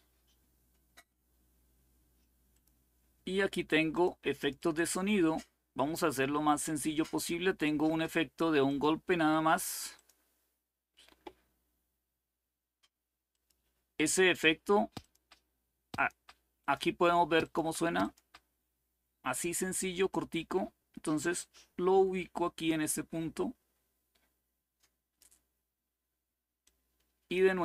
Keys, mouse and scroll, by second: 0.0-0.6 scroll down 2, 0.6-2.2 scroll down 1, 2.2 click, 3.6 click, 4.1 click, 5.0-8.0 scroll down 2, 8.4 click, 9.6 click, 10.4 click, 13.0 click, 14.7 click, 15.6 click, 17.2 click, 17.8 click, 19.8-24.9 drag, 26.3 click.